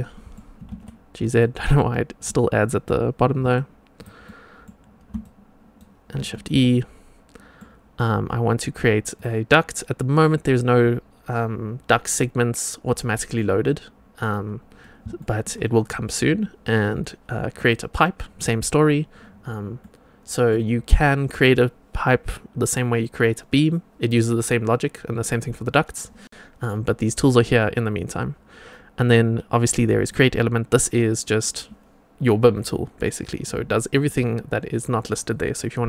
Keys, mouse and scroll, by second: 0.5 g, 1.5-2.1 middle drag, 3.2 g, 4.1-4.6 middle drag, 5.1-5.7 shift+right drag, 6.1 shift+e, 6.6-7.5 middle drag, 9.1 click, 14.7 scroll up 1, 15.1 shift+middle click, 17.5 click, 19.7 middle click, 30.0 click, 33.8-35.8 drag.